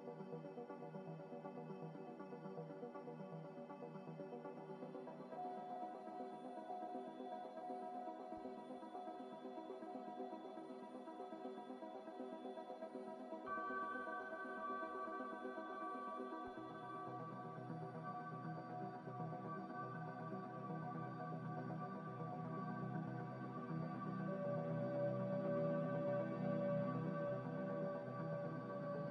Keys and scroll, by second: 9.9 m, 11.8 Escape, 12.3 ctrl+z, 22.1 a.